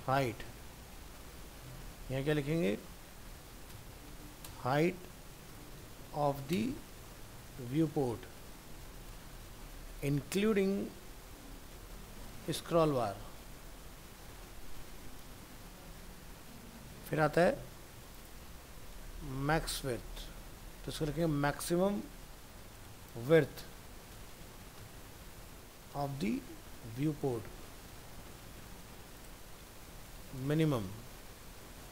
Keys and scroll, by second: 2.1 ctrl+v, 3.7 ctrl+shift+Right, 5.0 ctrl+shift+Left, 19.9 ctrl+v, 22.9 ctrl+shift+Left, 28.1 ctrl+c, 30.4 ctrl+v.